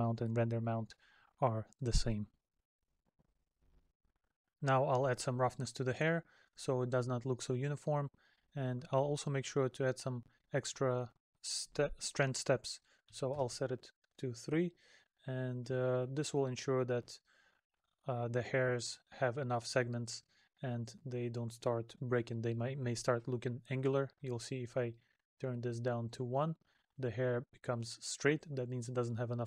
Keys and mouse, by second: 14.4 middle click, 19.2 middle click, 20.4 middle click, 21.5 middle click, 27.4 middle click.